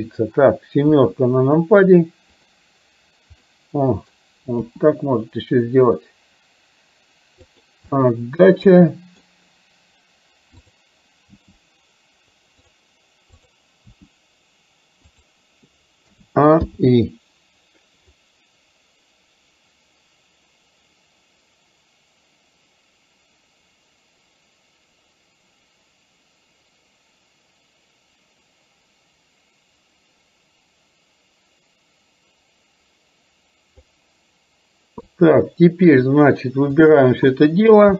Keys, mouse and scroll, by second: 0.8 KP_7, 3.5 middle click, 4.7 r, 8.0-9.3 middle drag, 11.5 r, 13.5 click, 13.8 r, 16.1 a, 16.7 i, 18.2-34.0 drag, 35.2 click.